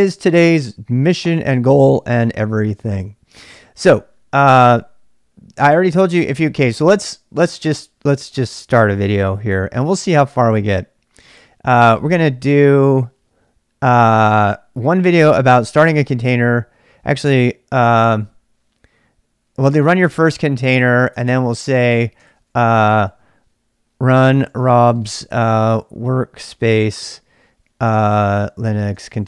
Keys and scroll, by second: 0.0-0.7 typing, 4.7-6.7 typing, 9.6 typing, 17.8 ctrl+[, 17.9 k, 18.0 k, 19.6-29.2 typing.